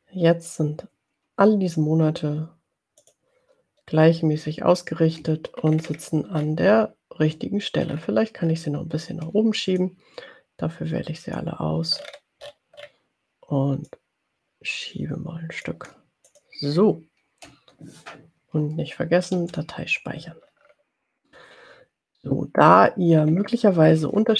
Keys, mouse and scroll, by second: 3.0 click, 5.7-6.2 ctrl+scroll up 2, 6.7 ctrl+scroll up 2, 7.9-8.2 ctrl+scroll down 2, 8.7 ctrl+scroll up 2, 8.9 ctrl+scroll down 2, 9.2 ctrl+scroll up 2, 9.9-11.8 drag, 12.0-13.2 ctrl+scroll up 2, 14.0 ctrl+click, 16.3 click, 19.4 ctrl+s, 20.4-21.2 ctrl+scroll down 2, 23.4-24.3 ctrl+scroll up 4.